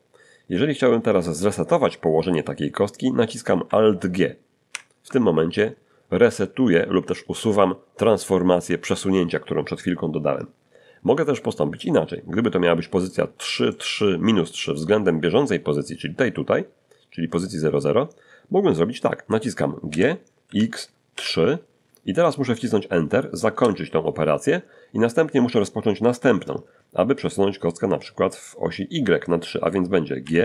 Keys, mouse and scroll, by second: 4.7 alt+g, 11.7-13.3 middle drag, 13.3 middle click, 19.9 g, 20.5 x, 21.1 3, 23.5 Return, 30.2 g.